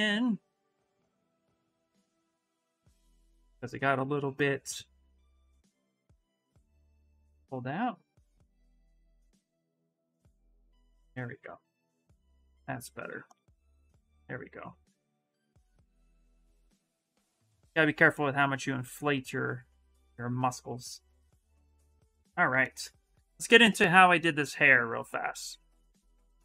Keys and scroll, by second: 0.2 BackSpace, 11.4-13.7 typing, 17.2 s.